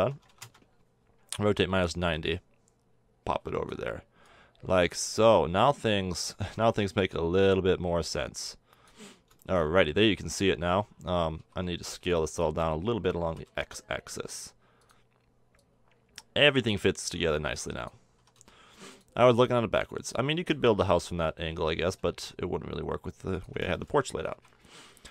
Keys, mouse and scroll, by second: 2.3-6.2 drag, 9.3-11.2 middle drag, 11.3 a, 12.0 b, 13.2 s, 15.6-17.4 drag, 18.1 s, 19.7-21.6 drag, 20.7 s, 23.7-24.0 middle drag, 24.3 a.